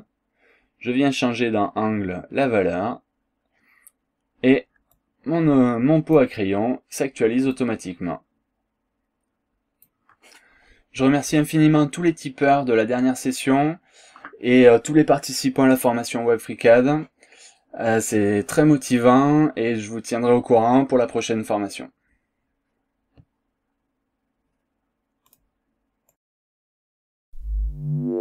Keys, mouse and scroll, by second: 5.0-6.4 drag, 6.7-7.0 scroll up 1, 7.6-9.9 drag, 25.3 click, 26.1-28.2 drag.